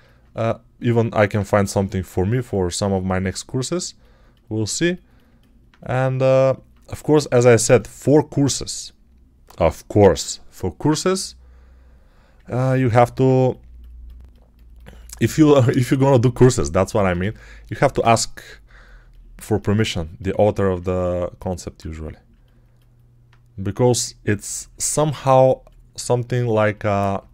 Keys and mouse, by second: 0.2 1, 1.6 g, 7.8 alt+click, 12.5 alt+click, 17.4 alt+click, 18.9 alt+click, 20.2 alt+click, 20.4 alt+click, 21.3 alt+click, 22.2 alt+click, 22.4 alt+click, 24.4 alt+click.